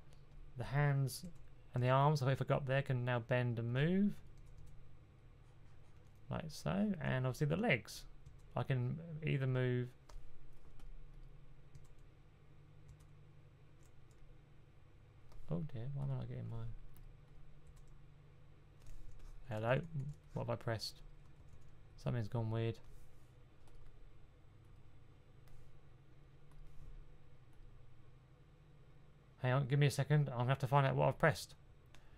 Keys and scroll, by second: 1.1-1.6 typing, 4.2 typing, 8.1 typing, 11.6 typing, 12.7 typing, 17.6 b, 19.1-21.8 typing.